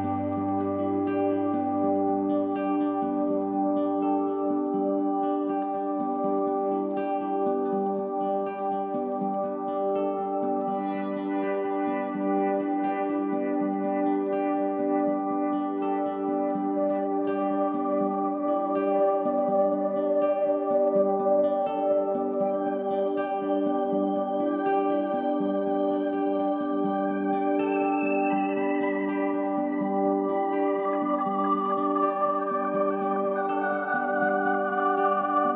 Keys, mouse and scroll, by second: 1.1-4.1 drag, 6.6-11.4 drag, 12.4-13.3 scroll up 2, 13.3-14.1 scroll up 1, 14.1-15.5 scroll up 1, 15.5 scroll up 1, 16.0-17.3 middle drag, 17.3 shift+a, 21.4-23.2 drag, 23.2-23.9 middle drag, 23.9 shift+a, 29.2-34.3 drag, 34.3 click.